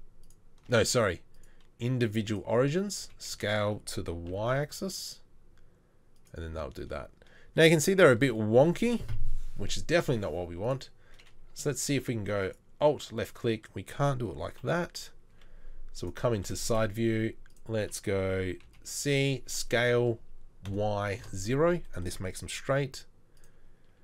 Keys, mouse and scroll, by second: 3.0 s, 4.0 s, 14.6 KP_3, 15.3 KP_3, 15.4 z, 17.0 1, 18.7 c, 19.5 s.